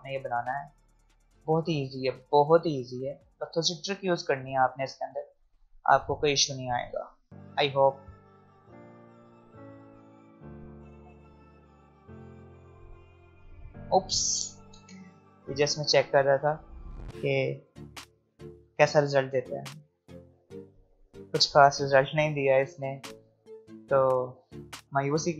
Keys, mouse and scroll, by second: 0.1-2.0 alt+scroll up 2, 2.2 alt+scroll down 1, 2.4 alt+scroll up 1, 3.2 alt+scroll down 1, 9.4-14.7 drag, 14.7 ctrl+z, 17.7 alt+scroll up 2, 18.3 alt+scroll up 1, 19.8-22.6 drag, 25.0 click.